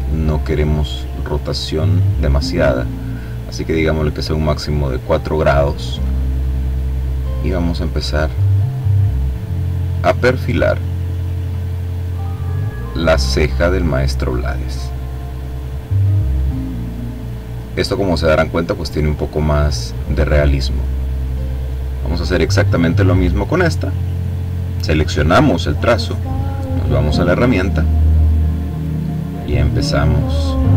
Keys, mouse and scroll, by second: 6.5-20.2 drag, 21.6 click, 22.7 click, 26.2 click, 27.5-30.7 drag.